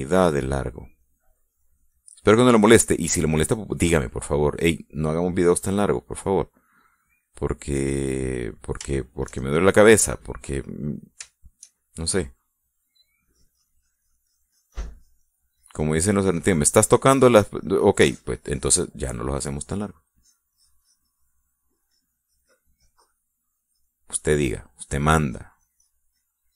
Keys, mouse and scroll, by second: 0.8-3.4 drag, 3.4 middle click, 4.2 middle click, 5.0 middle click, 5.9-7.3 drag, 8.0 middle click, 8.6 middle click, 9.5 middle click, 10.2 shift+middle click, 12.5 shift+middle click, 14.5-16.7 drag, 16.8-18.8 drag, 19.1 click, 19.6-20.8 drag, 21.4-22.7 drag, 22.9-26.0 drag, 26.3-26.5 drag.